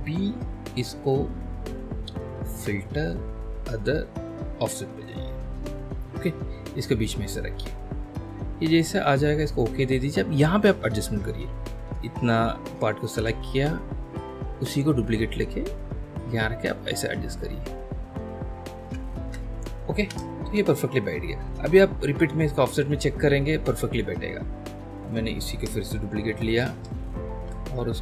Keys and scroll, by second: 11.4 l, 19.2 ctrl+alt+shift+d, 20.0 space, 21.5 ctrl+alt+space, 22.0 ctrl+alt+h, 26.1 ctrl+j, 27.3 ctrl+j, 27.3 ctrl+h.